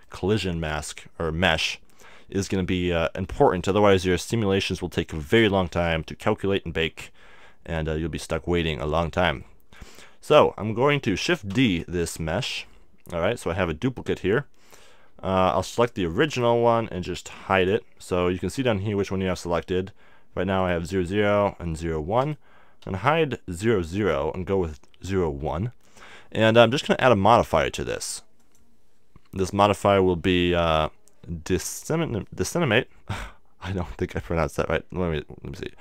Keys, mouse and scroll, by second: 0.0-2.0 middle drag, 2.4-11.5 middle drag, 11.5 shift+d, 12.6-14.3 drag, 16.3-19.4 right drag, 20.6-26.0 right drag, 22.9 h, 26.9-30.2 drag.